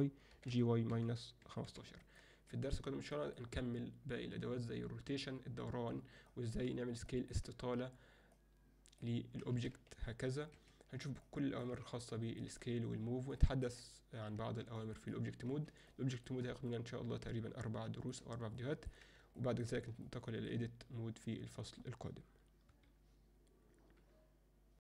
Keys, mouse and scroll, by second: 0.3 g, 3.1 middle click, 6.3 middle drag, 7.1 alt+middle click, 8.5-9.1 drag, 9.5 s, 11.3-11.7 middle drag, 12.1 ctrl+middle click, 13.4 ctrl+alt+middle drag, 14.8 ctrl+middle click, 15.9 alt+shift+middle click, 16.7-18.1 alt+middle drag, 18.6-18.9 ctrl+alt+middle drag, 19.4 alt+shift+middle click, 20.1 ctrl+alt+middle click, 22.7 F10.